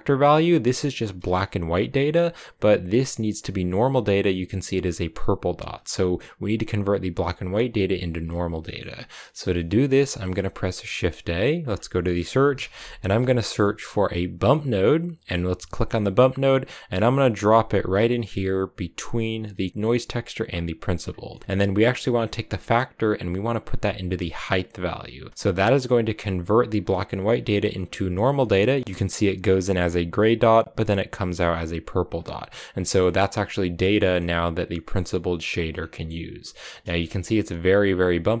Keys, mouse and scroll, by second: 0.0-1.7 drag, 8.5 middle click, 8.7-10.2 scroll down 1, 10.2 shift+a, 20.7 click, 21.1 middle click, 21.3-22.0 scroll up 4, 22.0-23.1 scroll down 1, 23.1 scroll down 1, 23.2-25.3 drag, 25.3-28.2 scroll down 3, 28.2 middle click, 28.4-30.8 scroll up 4, 31.4-31.9 scroll down 4, 31.9 click, 32.5 scroll down 2, 32.6 middle click, 32.8 scroll up 2, 33.7 scroll down 2, 33.8-35.6 middle drag, 35.6 scroll down 1, 35.7-38.4 middle drag.